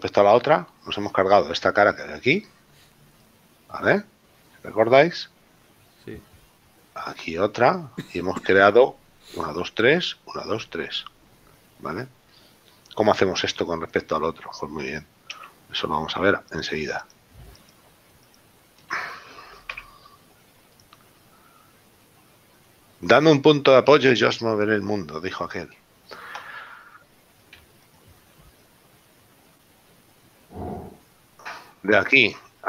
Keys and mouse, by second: 15.7 Tab, 18.6 shift+right click, 20.0 x, 22.7 middle click, 23.7 right click, 27.9 alt+right click, 31.1 shift+right click, 32.0 right click.